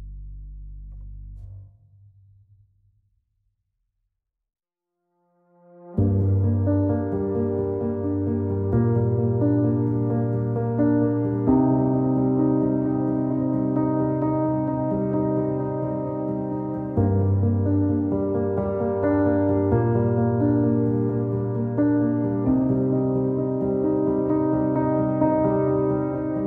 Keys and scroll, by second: 11.2 w, 22.8 r, 24.7 w.